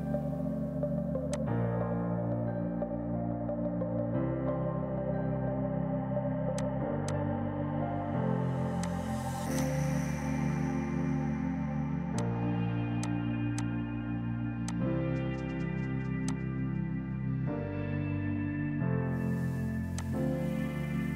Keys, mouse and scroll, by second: 3.4 space, 4.9 ctrl+z, 5.6 ctrl+z, 6.6 click, 8.9 alt+click, 9.6 click, 19.1 space, 20.0 click.